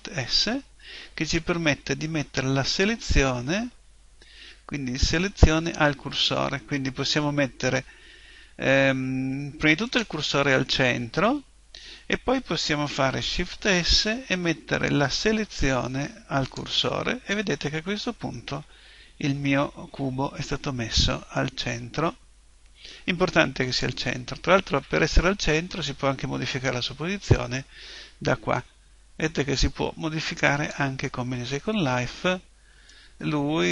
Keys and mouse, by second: 13.5 shift+s, 21.3 click.